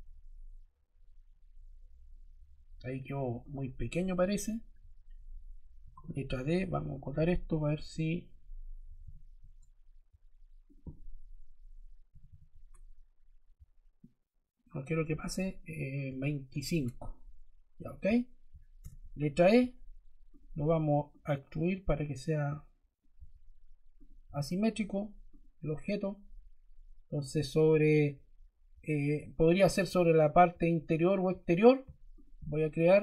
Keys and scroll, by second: 4.6 Escape, 5.7 d, 8.5-9.4 typing, 11.7-12.6 typing, 16.0 2, 16.4 5, 16.6 Return, 18.7 e.